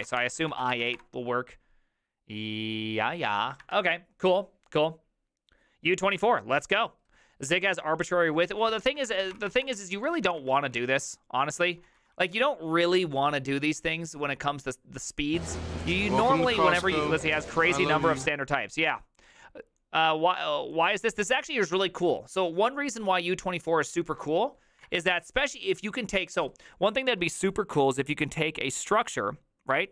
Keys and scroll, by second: 0.0-1.4 typing, 8.8 alt+{, 9.0-12.7 typing, 15.9 alt++, 24.9 alt++.